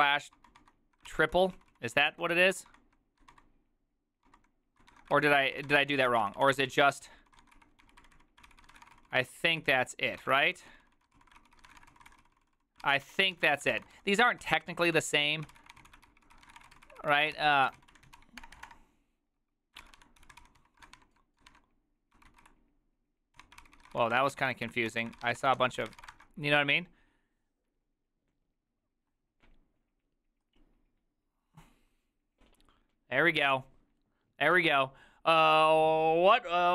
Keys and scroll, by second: 0.0-26.0 typing, 5.2 ctrl+c, 23.5 Tab, 26.2 Return.